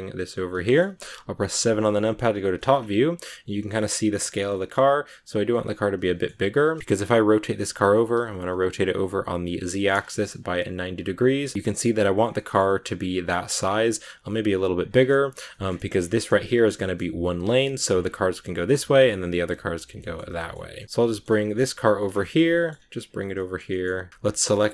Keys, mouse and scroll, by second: 0.6 shift+middle click, 1.4 KP_7, 2.1 shift+middle click, 2.6 scroll up 2, 3.1 g, 4.4 shift+middle click, 5.0 s, 5.9 middle click, 6.4 r, 8.9 r, 11.5 g, 12.2 scroll down 1, 12.2 middle click, 12.9 scroll up 2, 13.6 scroll down 2, 13.7 middle click, 14.2 s, 15.0 middle click, 15.7 scroll down 2, 15.7 scroll up 1, 15.9-17.9 shift+middle drag, 17.9 scroll up 1, 17.9-19.8 scroll down 1, 19.8 scroll down 1, 19.9 shift+middle click, 20.6 scroll up 1, 20.7 shift+middle click, 20.9 g, 22.1 shift+middle click, 22.4 g, 23.3 middle click, 23.6 g.